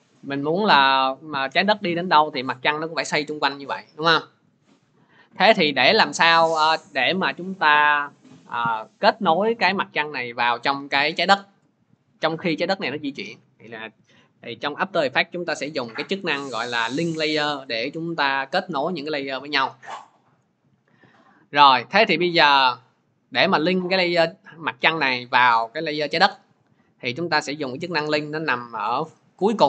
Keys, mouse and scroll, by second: 0.1 click, 1.1 click, 2.6 click, 4.4 click, 13.8 click, 22.4-27.5 drag.